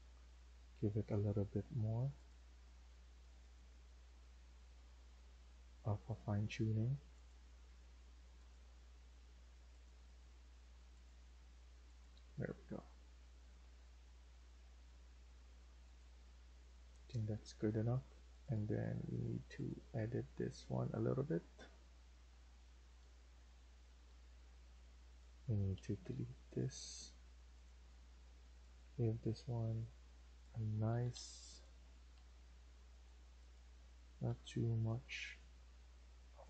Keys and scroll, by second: 0.7 Delete, 1.2 Escape, 7.6 Escape, 12.3 Escape, 16.8 Escape, 17.0 Escape, 17.3 Escape, 22.0 Right, 22.2 Right, 23.8 Escape, 24.0 Escape, 25.6 Delete, 25.9 Delete, 26.6 Delete, 30.8 Escape, 31.0 Escape, 32.0 Delete, 34.2 Delete.